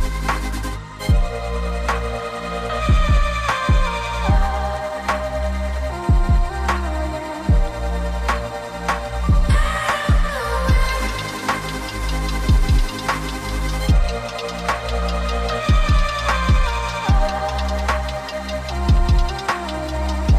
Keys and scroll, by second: 2.3 g, 3.2 v, 3.5 g, 4.3 v, 5.4 ctrl+3, 6.0 ctrl+z, 6.6 g, 7.7 v, 8.7 g, 9.1 a, 9.5 g, 10.6 v, 11.6 ctrl+z, 17.7 Delete.